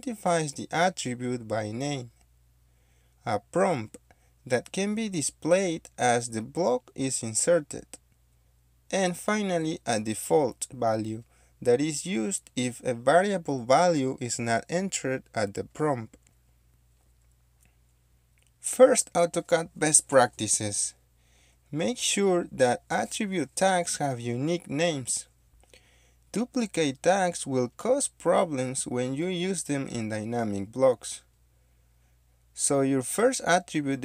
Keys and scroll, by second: 18.9 d, 21.5 BackSpace, 21.9 Caps_Lock, 22.5 d, 24.2 shift+3, 31.2-32.6 typing, 33.6-34.0 typing.